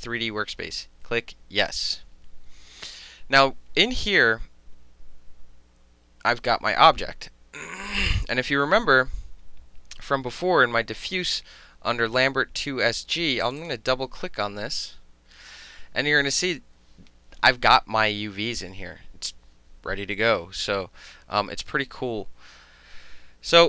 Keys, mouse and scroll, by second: 1.7 click, 13.5 click, 13.6 click.